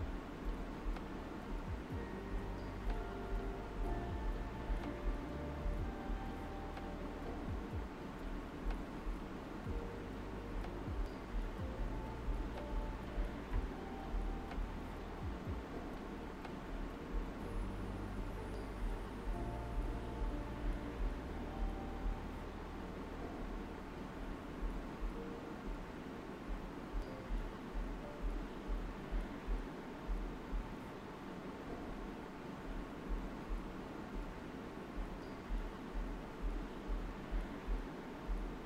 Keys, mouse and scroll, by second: 0.5-4.1 alt+right drag, 4.1-4.6 typing, 4.3 click, 6.7-16.7 drag, 17.9 right click, 18.3 alt+right click, 18.3 typing, 19.9-20.7 typing, 20.7 alt+right click, 21.7 space, 21.9 click, 22.2 space, 22.9 alt+click, 24.5 shift+click, 24.5 typing, 26.5 ctrl+z, 27.4 alt+click, 30.7 shift+click, 31.7 alt+right click, 32.8 alt+right click, 34.1 click, 35.8-38.6 shift+drag, 38.5 typing.